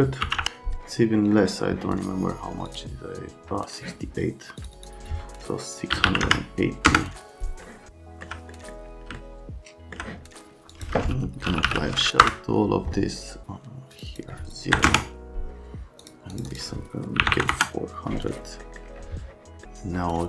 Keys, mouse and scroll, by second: 0.2 KP_7, 0.4 KP_0, 5.9 KP_6, 6.0 KP_8, 6.2 KP_0, 6.8 KP_Enter, 7.9 alt+Scroll_Lock, 10.7 F10, 11.3-12.2 typing, 12.2 Return, 14.7 KP_0, 14.8 KP_Enter, 17.2 KP_4, 17.2 KP_0, 17.5 KP_Enter.